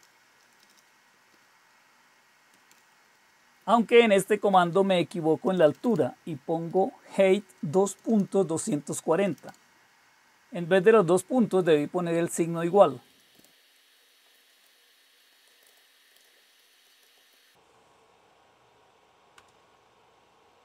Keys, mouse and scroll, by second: 0.0-1.2 typing, 2.4-2.8 typing, 4.6-9.2 typing, 11.0-17.2 typing, 19.1 Return.